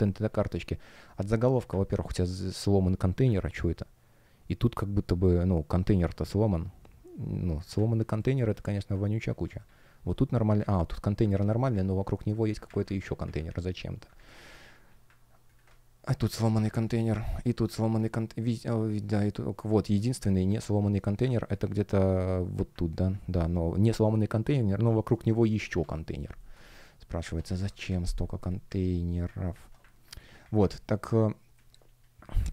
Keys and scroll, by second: 8.1 space, 26.3 space, 27.4 Escape, 31.4 space.